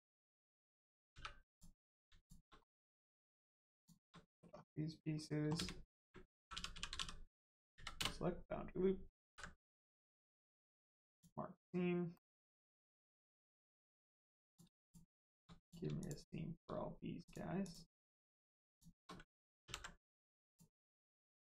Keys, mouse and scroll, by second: 1.1 3, 1.4 click, 2.2 shift+click, 2.7 middle click, 3.7 shift+click, 4.2 middle click, 4.3 middle click, 4.5-5.0 scroll down 1, 5.5-6.9 typing, 9.2 ctrl+e, 11.0 click, 12.1 middle click, 13.2-13.6 scroll up 1, 13.6 middle click, 14.4 click, 14.8 shift+click, 15.6 click, 16.0 shift+click, 17.2 click, 18.6 shift+click, 19.6 ctrl+e, 20.4 click, 20.8 scroll down 1, 21.1 middle click.